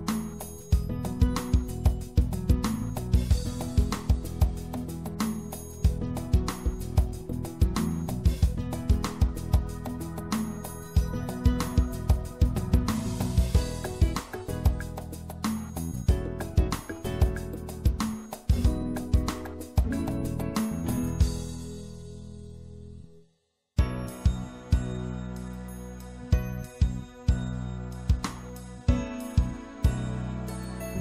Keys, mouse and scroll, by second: 1.0 click, 1.7-4.4 right drag, 3.5 c, 9.5-11.3 right drag, 10.1 ctrl+z, 11.5 c.